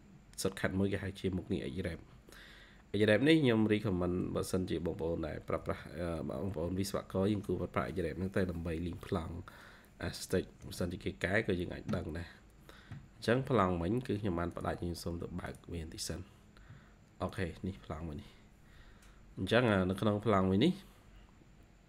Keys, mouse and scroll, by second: 1.9 Escape, 3.4-4.1 typing, 5.5 Escape, 6.1 typing, 10.5 space.